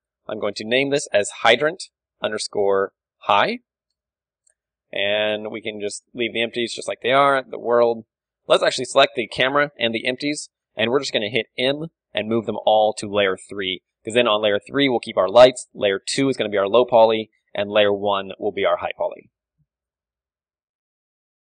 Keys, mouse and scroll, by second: 0.6-10.9 drag, 5.6-7.6 middle drag, 10.1-12.4 middle drag, 11.7 m, 14.3 a, 16.9-19.2 middle drag, 17.2 z, 19.6 ctrl+w.